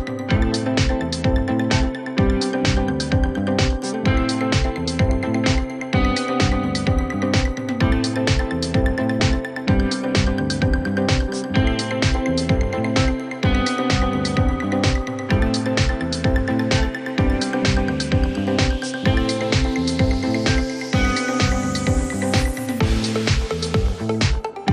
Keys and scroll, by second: 4.4 4, 4.5 0, 5.0 Return, 5.7 space, 6.8 e, 7.1 Escape, 9.8 Escape.